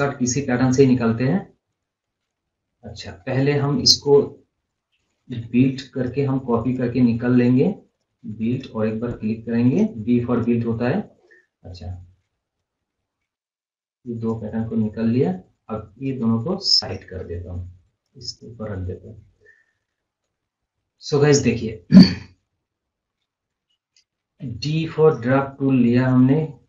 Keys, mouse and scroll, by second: 0.4 scroll up 1, 1.6-2.1 scroll down 1, 2.1 scroll down 1, 2.2 click, 3.5 scroll up 1, 3.7-4.5 scroll down 1, 4.6 scroll, 4.7 scroll up 2, 5.3 b, 5.9 click, 9.6 right click, 10.3 click, 11.0 scroll up 1, 11.1 scroll down 1, 11.6-14.5 drag, 14.5 scroll, 14.7 scroll down 1, 15.4-18.3 drag, 18.3 scroll up 1, 19.0 scroll up 1, 19.4 scroll down 1, 20.1 click, 21.1 scroll up 1, 21.3 scroll down 1, 21.8 scroll up 1, 21.9 scroll down 1, 24.3 d, 25.1 scroll down 1.